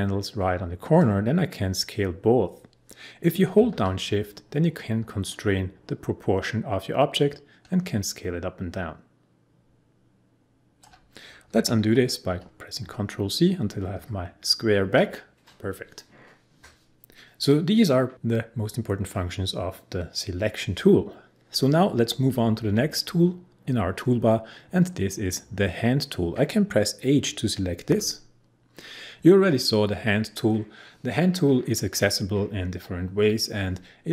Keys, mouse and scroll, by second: 1.0-10.9 drag, 12.2 ctrl+z, 27.9 h.